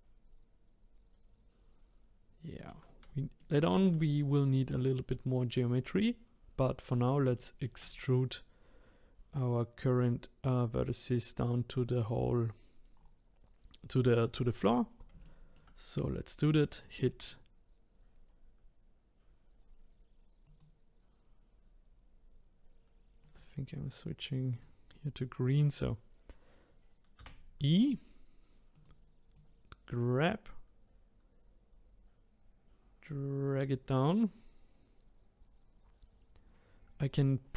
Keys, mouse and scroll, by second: 3.4-6.4 middle drag, 7.3-9.5 shift+middle drag, 9.5-12.9 drag, 13.0-14.3 scroll down 3, 14.3 scroll up 1, 15.2-18.2 middle drag, 18.2-20.4 scroll down 1, 20.4 click, 23.2 click, 25.4-27.2 scroll up 1, 27.2 e, 29.3 click.